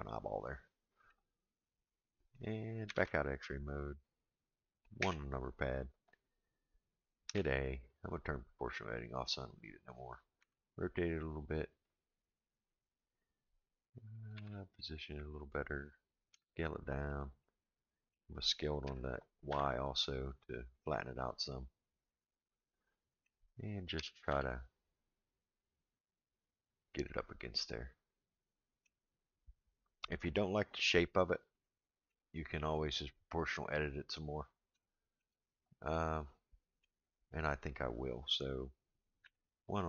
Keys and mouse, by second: 2.9 alt+z, 5.0 KP_1, 7.3 a, 8.6 click, 10.4 r, 14.3 g, 16.3 s, 17.4 middle click, 18.8 s, 22.1-23.3 middle drag, 23.9 g, 27.1-28.8 middle drag, 31.6 shift+middle click, 34.8 shift+middle click, 35.9 middle click, 39.2 KP_1.